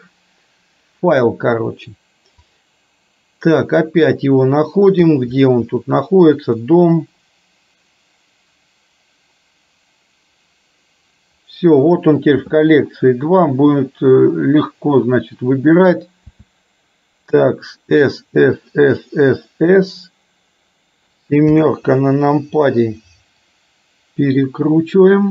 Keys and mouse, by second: 16.4 s, 21.7 KP_7, 23.7-25.3 drag.